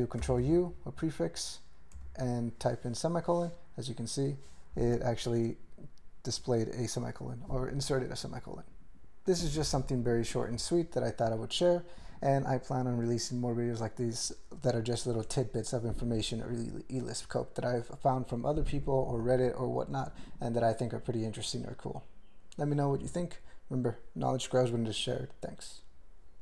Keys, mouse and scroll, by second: 0.2 ctrl+u, 2.0 ;.